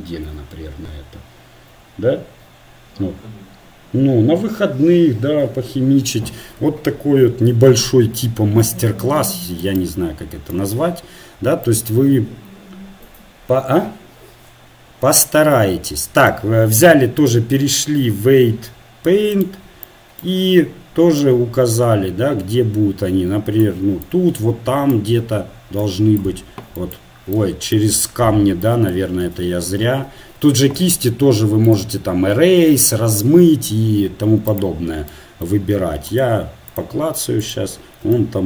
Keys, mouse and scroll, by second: 8.9-10.8 middle drag, 18.7-19.9 drag, 25.1-29.5 drag, 29.5 ctrl+z, 30.0 ctrl+z, 36.3-38.4 drag.